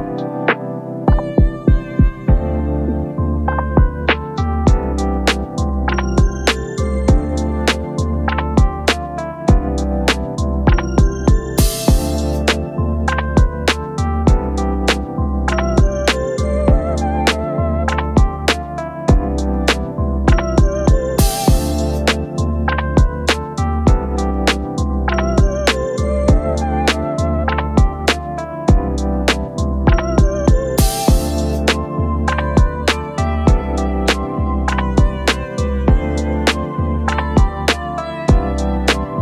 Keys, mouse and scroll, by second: 10.2-12.3 space, 30.4-30.8 alt+scroll down 1, 31.0-31.6 space, 35.0 space, 36.0 shift+click, 38.4-38.7 alt+scroll up 1.